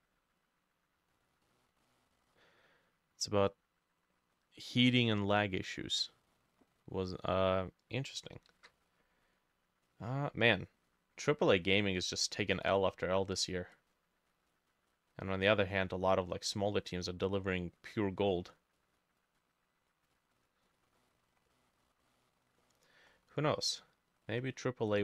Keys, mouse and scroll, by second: 1.5 middle click, 3.5 scroll up 1, 5.7-6.1 scroll down 1, 6.1 middle click, 6.8 scroll up 1, 7.1 middle click, 8.6 ctrl+u, 20.7 scroll down 2, 21.0 middle click, 21.5 middle click, 22.7 middle click, 23.1 scroll up 3, 23.5 middle click, 23.7 scroll down 2, 24.3-25.0 scroll up 1.